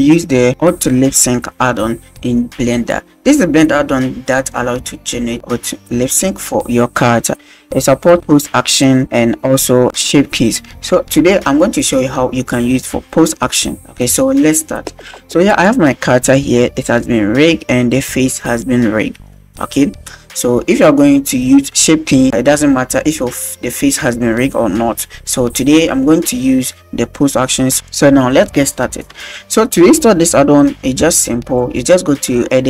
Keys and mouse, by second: 18.6-19.4 shift+middle drag, 31.6-32.6 drag.